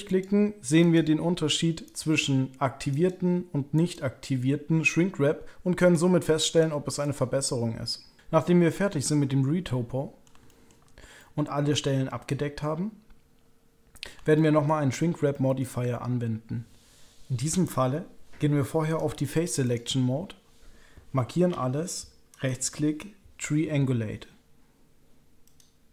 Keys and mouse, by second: 0.0 click, 0.8 click, 1.8 click, 2.9 click, 3.7 click, 5.8 click, 7.0 click, 8.2-10.2 middle drag, 10.4 shift+middle click, 11.2-14.0 middle drag, 14.3 shift+middle click, 15.3 shift+middle click, 18.9 click, 19.7 click, 21.5-22.3 typing, 22.3-25.6 right drag.